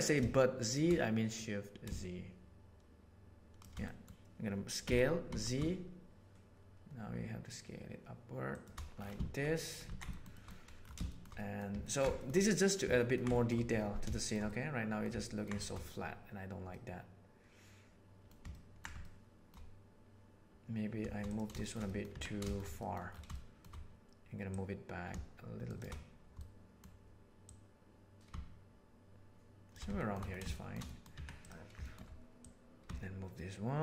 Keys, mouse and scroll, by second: 1.3-3.4 drag, 3.4 shift+right click, 3.8 middle click, 4.8 s, 9.5-9.9 middle drag, 9.9 alt+a, 10.1 shift+middle click, 10.3 shift+middle click, 11.1 shift+middle click, 11.3-11.7 middle drag, 11.8 ctrl+middle drag, 12.4-12.7 middle drag, 12.9 ctrl+middle click, 13.3 shift+middle click, 14.1-15.0 shift+middle drag, 15.2 ctrl+middle click, 15.6 shift+middle drag, 16.7-18.3 middle drag, 18.5 ctrl+middle click, 19.1 shift+middle click, 21.6 shift+middle click, 21.9 middle click, 22.1 Tab, 22.4 shift+middle click, 22.8 middle click, 23.3 shift+middle click, 24.5-25.8 middle drag, 26.3 middle click, 27.5-28.5 drag, 28.5-29.7 shift+middle drag, 29.9 shift+middle click, 30.5 shift+middle click, 30.9 middle click, 31.1 Tab, 31.8 shift+middle click, 32.5 click, 32.9-33.8 shift+middle drag.